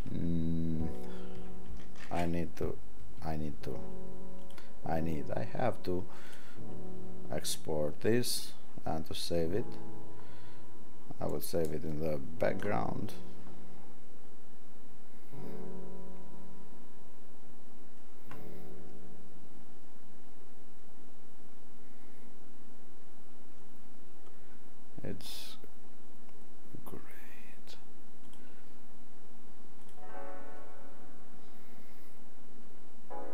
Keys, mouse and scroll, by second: 2.0 ctrl+alt+shift+w.